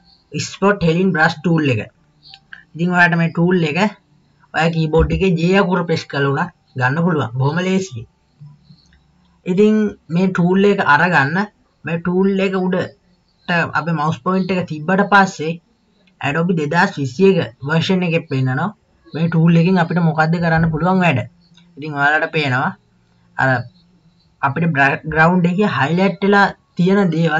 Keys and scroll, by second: 5.0 j.